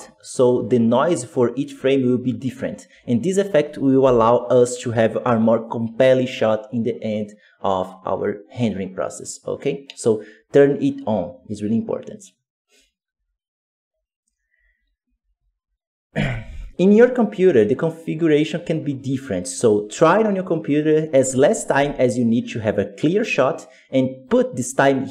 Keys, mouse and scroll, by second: 2.3-2.6 scroll down 7, 3.9 Home.